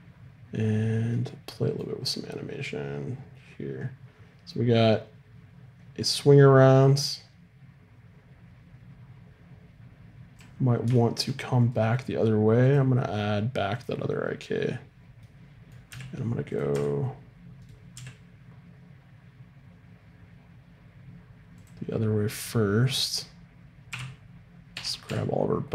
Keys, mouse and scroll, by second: 2.6-4.6 drag, 10.6 middle click, 11.6-13.8 right drag, 12.6-14.7 drag, 15.9 g, 16.7 r, 17.9 g, 23.9 i, 24.7 a, 25.1 a.